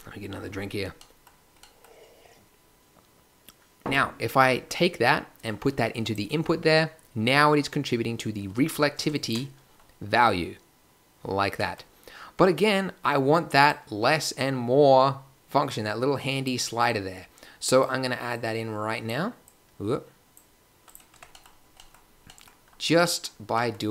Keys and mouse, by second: 10.4-10.9 drag, 12.7-13.7 drag, 14.2 drag, 15.7-16.4 drag, 16.7-17.8 drag, 18.0 click, 18.3-19.1 drag, 19.5 click, 21.1 Tab.